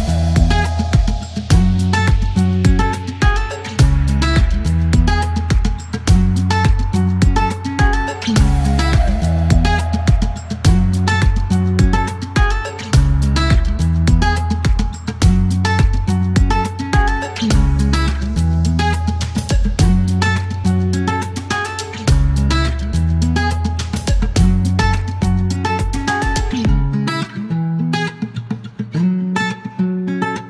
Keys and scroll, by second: 7.0 typing, 8.4 KP_3, 8.5 KP_0, 8.6 Return, 10.3 typing, 13.7 alt+u, 13.8 alt+m, 15.9 ctrl+e, 20.3 KP_9, 24.1 typing, 26.1 KP_Subtract, 26.2 KP_Decimal, 26.3 KP_5, 26.4 Return, 26.8 u, 27.9-30.4 typing.